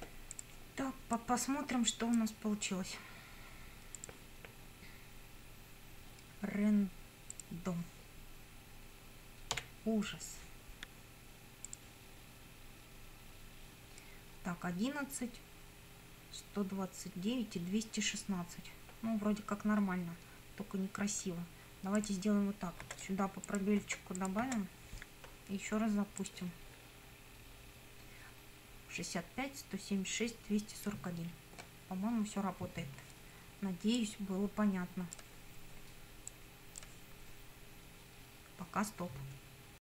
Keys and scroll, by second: 9.6 d, 22.8 space.